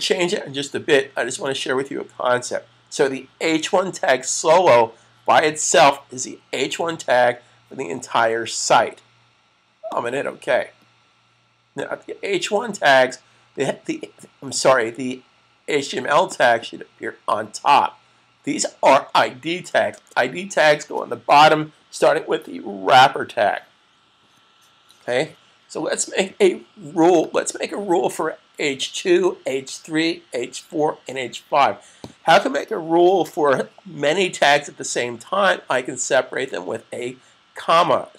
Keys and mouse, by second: 9.6 click, 16.2 click, 19.7 super+s, 27.2 click.